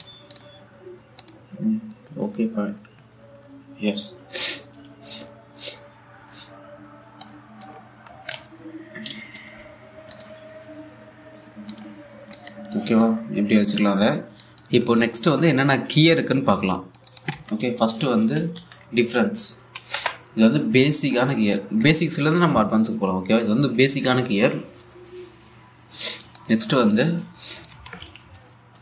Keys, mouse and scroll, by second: 0.6 1, 0.9 click, 7.9-10.7 drag, 12.3 click, 12.7 scroll down 1, 13.0 alt+click, 17.2 click, 18.0 Tab, 18.6-19.8 typing, 19.9 Down, 20.6 Return, 21.7-22.2 scroll up 1, 22.2 click, 26.9 click, 28.4 Tab.